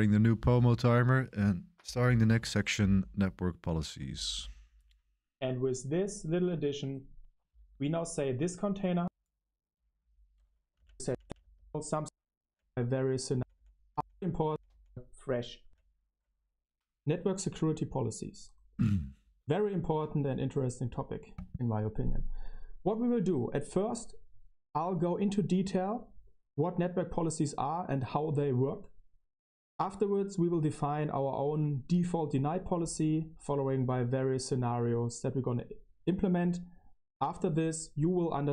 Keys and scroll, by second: 4.1 super+1, 4.3 super+1, 10.7 Tab, 11.0 Tab, 11.2 Tab, 11.6-13.9 typing, 14.4 Left, 14.6 Left, 15.6 Right.